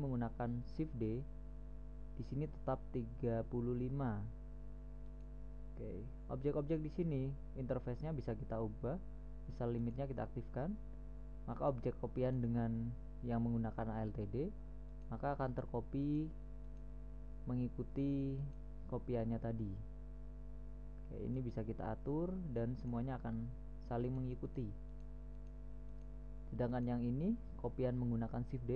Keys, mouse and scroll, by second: 1.3 middle click, 5.5-7.2 right drag, 10.2-12.0 drag, 12.0-14.3 right drag, 15.3 right click, 15.9-16.4 drag, 16.4-20.5 right drag, 20.5 middle click, 20.7 middle click, 21.7-23.3 right drag, 23.5 middle click, 23.7-24.5 middle drag, 24.5-28.7 right drag.